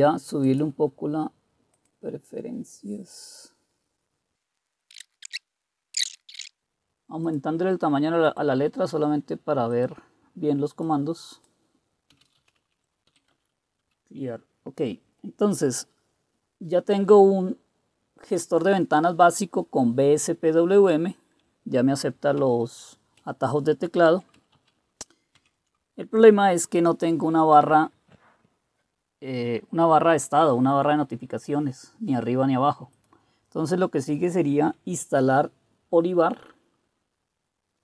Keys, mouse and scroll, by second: 4.4 click, 4.7-6.6 typing, 6.0 click, 10.9-13.1 drag, 11.9-13.1 typing, 13.3 Return, 22.4 super+4, 23.9 super+3, 24.5 super+2, 25.3 super+1.